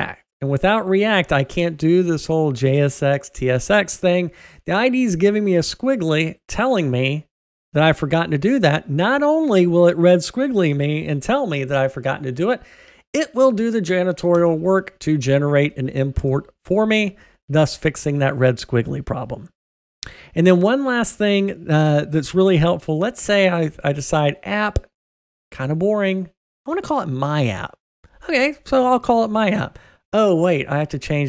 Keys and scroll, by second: 14.4 alt+Return.